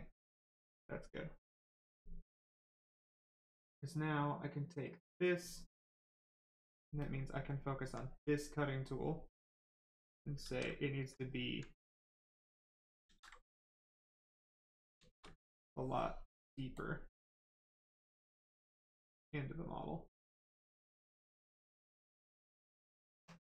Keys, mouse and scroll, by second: 0.2 shift+right click, 3.5 click, 6.9 alt+click, 7.5 alt+click, 8.1 right click, 9.6 click, 10.4 ctrl+z, 10.7 right click, 11.2 alt+right click, 12.1 click, 13.0 ctrl+z, 14.1 click, 14.7 right click, 15.7 ctrl+click, 17.6 click, 18.1 right click, 19.3 click, 21.7 click.